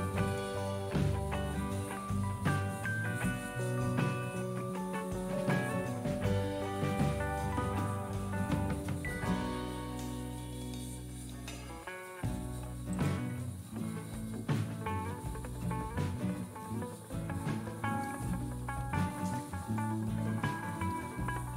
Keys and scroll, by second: 0.0-0.1 typing, 0.4 Return.